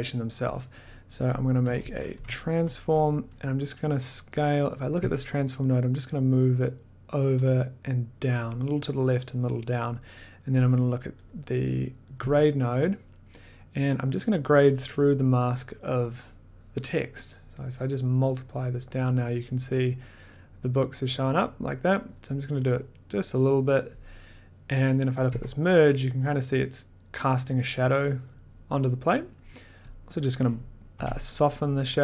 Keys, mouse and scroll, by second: 1.3 click, 1.6 t, 2.5 ctrl+click, 3.0 click, 4.9 click, 5.0 1, 8.4 click, 9.9 click, 10.1 click, 10.2 click, 11.3 click, 11.6 click, 12.1 click, 12.2 1, 23.9 click, 25.2 click, 25.3 1, 30.1 click, 30.9 b.